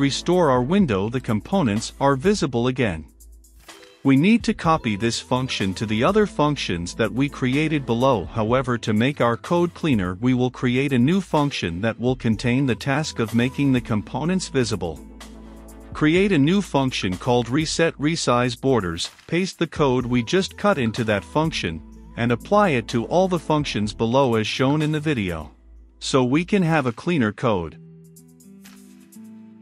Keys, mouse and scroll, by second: 5.1-6.1 scroll down 2, 6.1 click, 6.8 Return, 7.3-14.5 typing, 9.2 Return, 9.9 Return, 15.6 Right, 15.8 shift+], 15.9 Return, 16.3 ctrl+v, 16.8 click, 19.4-20.5 scroll down 2, 20.5 click, 20.6 ctrl+v, 20.9 Return, 21.3-24.5 typing, 22.8 Return, 25.5-27.7 drag, 28.0 ctrl+c, 28.6 ctrl+click, 29.5 Return.